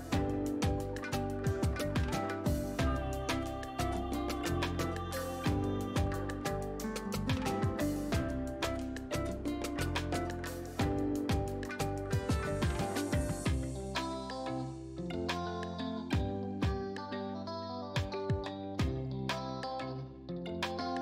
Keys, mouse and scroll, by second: 2.4 click, 7.1 click.